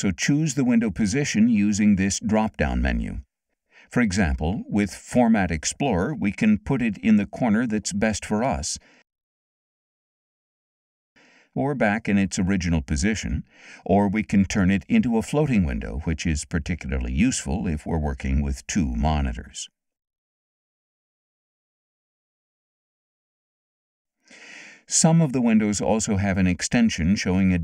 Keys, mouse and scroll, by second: 1.9 click, 3.8 click, 7.2 click, 9.0 click, 11.8 click, 13.3 click, 15.9 click, 17.6 click, 19.8-21.8 drag, 22.4 click, 23.5 click.